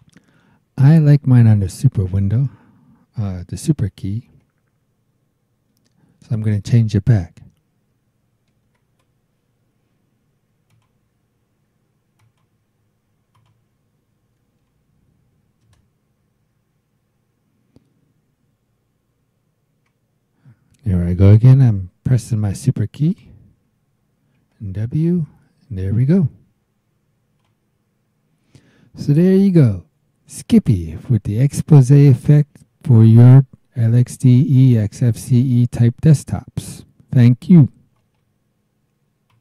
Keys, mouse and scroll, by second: 0.0 click, 4.3 BackSpace, 8.5 shift+w, 10.7 click, 12.2 click, 13.3 click, 14.6 Up, 15.6 KP_Enter, 24.4 super+w, 27.4 click, 38.0 right click, 39.3 click.